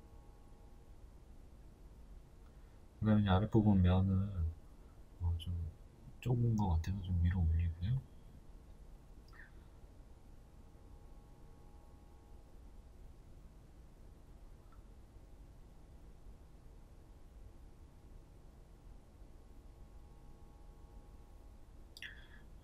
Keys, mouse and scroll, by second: 1.1 Tab, 2.1 right click, 3.4 KP_1, 4.3 g, 7.7 Tab, 7.9 right click, 8.5 right click, 9.0-15.4 shift+middle drag, 15.3 ctrl+b, 15.4 right click, 17.3 Tab, 18.2 a, 20.1 ctrl+b.